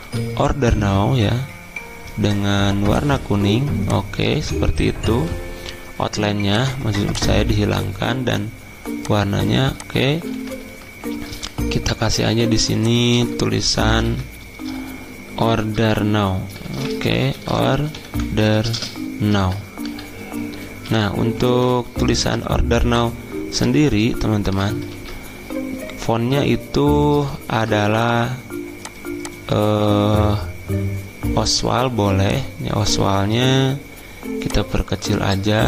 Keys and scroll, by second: 0.0 m, 5.1 x, 10.5 ctrl+z, 12.3 t, 14.0 Caps_Lock, 16.9-22.1 typing, 24.2-26.2 typing, 27.5 ctrl+t.